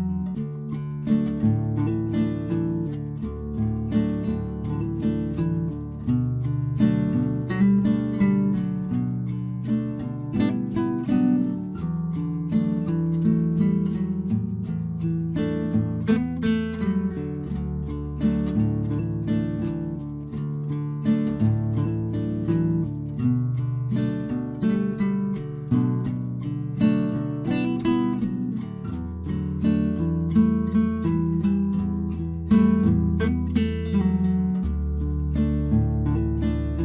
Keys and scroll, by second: 2.7 Return, 6.1 ctrl+t, 9.0 Return.